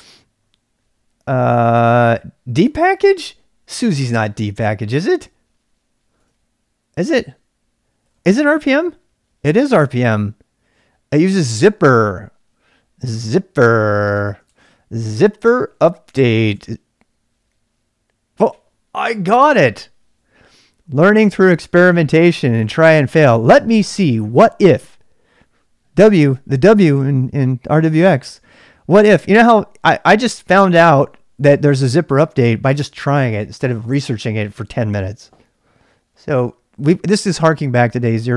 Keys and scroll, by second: 0.0-38.3 typing, 8.6 Return, 14.2 Tab, 14.4 Tab.